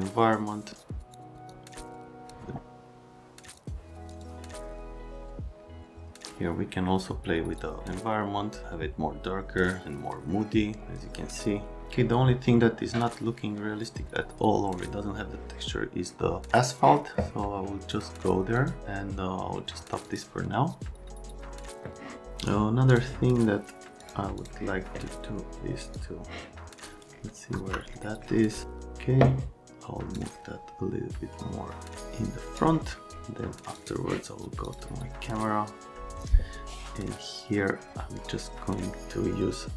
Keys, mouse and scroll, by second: 1.0 click, 1.5 click, 3.4 click, 4.1 click, 4.4 click, 17.9 click, 18.5 click, 20.0 click, 22.9 click, 24.0 click, 24.3 click, 25.8 click, 30.1-32.5 drag, 33.8 click, 34.7 click.